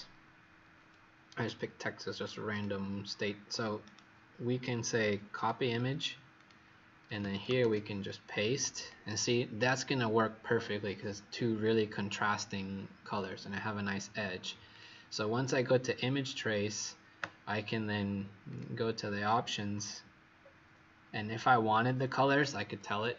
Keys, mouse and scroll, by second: 2.4 click, 3.8 right click, 5.3 click, 7.5 ctrl+v, 8.3 click, 20.4-21.3 alt+scroll up 2, 21.6 alt+scroll down 1.